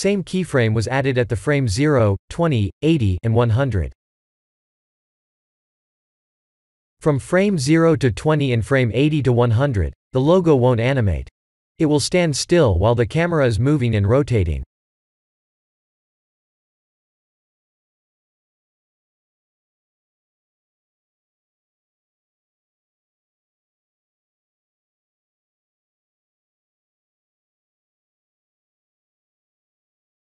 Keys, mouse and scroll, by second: 2.4 click, 2.9 click, 6.0 space, 6.7 space, 7.6 click.